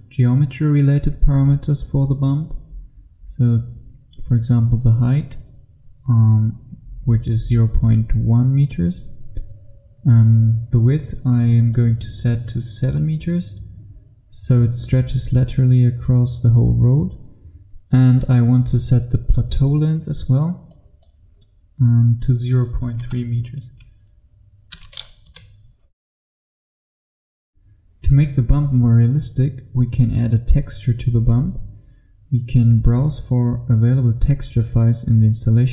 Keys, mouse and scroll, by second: 11.4 click, 12.9 KP_7, 20.8 click, 23.1 KP_0, 25.3 KP_3, 27.1 F1.